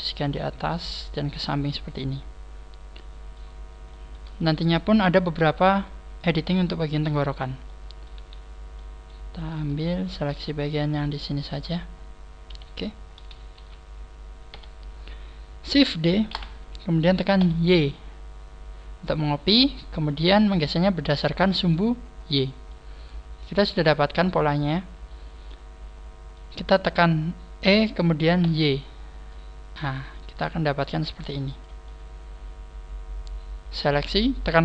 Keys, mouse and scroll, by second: 1.8 shift+middle click, 3.8 shift+middle click, 4.4 shift+middle click, 5.5 scroll up 4, 5.8 middle click, 7.2 right click, 7.2 scroll down 2, 7.7 shift+middle click, 8.2 middle click, 8.2 a, 8.6 middle click, 9.9 alt+shift+right click, 10.5 middle click, 11.9 scroll down 4, 12.4 KP_1, 12.8 scroll down 3, 13.5 z, 14.0 scroll down 2, 14.4 KP_3, 15.2 scroll down 2, 16.2 shift+d, 19.5 click, 20.0 shift+middle click, 22.6 middle click, 23.6-24.2 scroll up 5, 24.0 middle click, 27.6 e, 31.5 click, 31.9 middle click.